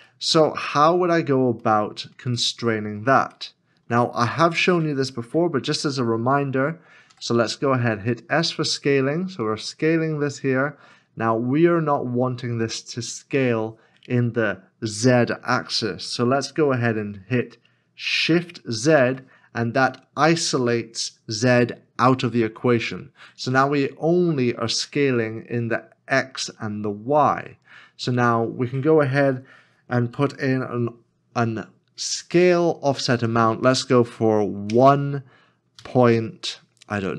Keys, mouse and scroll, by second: 0.3 middle click, 1.0 scroll up 1, 1.8 shift+middle click, 3.5 shift+middle click, 7.1 s, 35.8 1, 35.8 ..